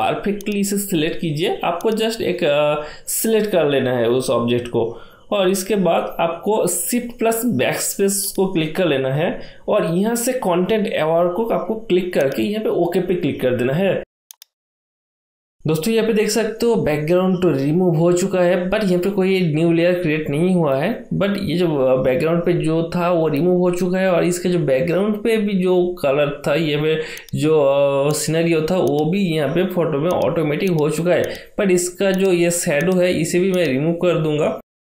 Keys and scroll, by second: 6.3 shift+BackSpace, 19.5 ctrl+d.